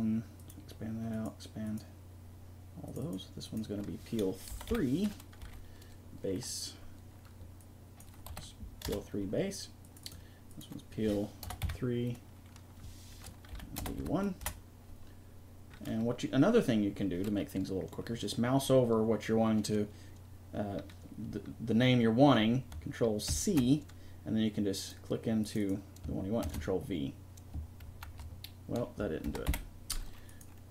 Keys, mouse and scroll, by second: 9.9-12.5 right drag, 23.3 ctrl+c, 24.8-29.8 drag.